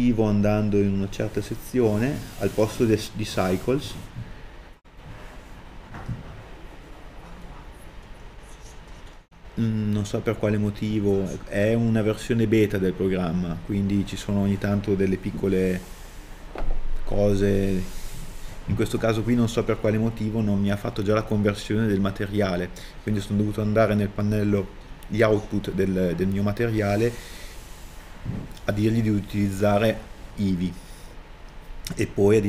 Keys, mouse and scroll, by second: 31.5 scroll down 1.